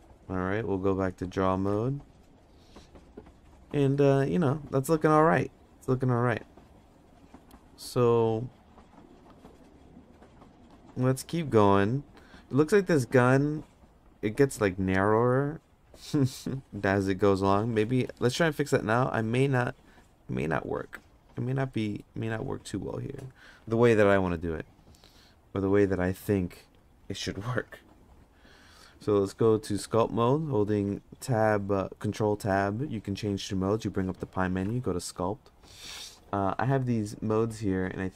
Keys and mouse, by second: 0.2 ctrl+Tab, 3.9 middle click, 10.6 middle click, 13.0 middle click, 17.8 middle click, 18.3 middle click, 21.7 middle click, 22.2 Tab, 24.1 g, 27.6 ctrl+z, 29.6 ctrl+Tab.